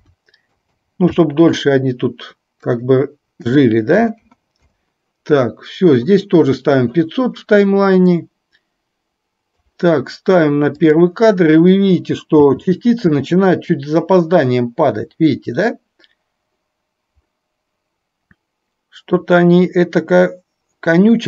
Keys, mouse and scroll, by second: 0.7 KP_0, 2.7-4.9 drag, 4.2 KP_0, 8.4-10.0 drag, 11.0 click, 12.5 space.